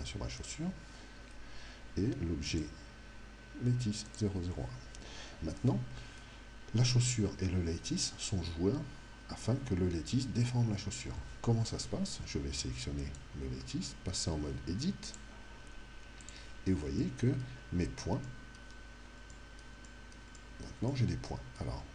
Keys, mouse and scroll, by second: 0.4 right click, 2.4 click, 13.1 right click, 15.1 click, 17.0-21.9 middle drag.